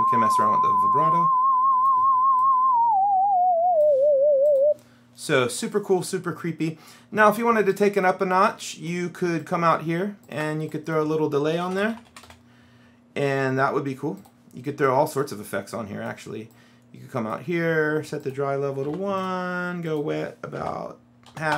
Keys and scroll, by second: 11.4-12.8 typing, 18.9 KP_1, 20.7 KP_Decimal, 21.3 KP_5.